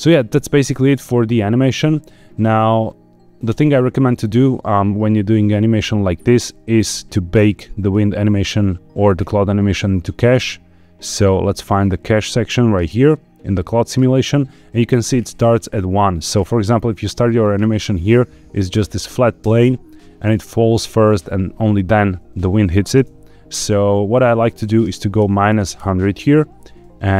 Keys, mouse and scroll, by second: 0.2-0.9 scroll down 1, 1.4-2.4 shift+middle drag, 2.9 scroll up 1, 3.4 space, 7.8 click, 11.3-12.7 scroll down 5, 12.7 click, 16.8-17.3 drag, 19.4 space, 22.9 space, 24.1-25.8 drag, 25.4 KP_0.